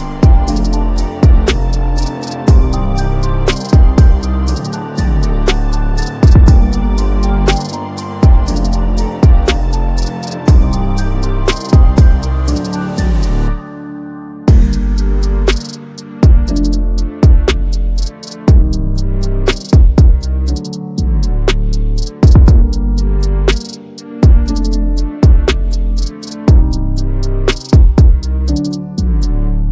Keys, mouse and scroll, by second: 1.8 click, 3.7-4.0 click, 4.2 drag, 6.1 drag, 7.3-8.1 drag, 9.4-10.9 alt+drag, 12.7-13.4 alt+drag, 16.0 alt+drag, 19.8-20.8 drag, 22.1 click, 23.5 click, 24.5 click, 25.4-26.7 typing, 26.5 click, 28.2 click.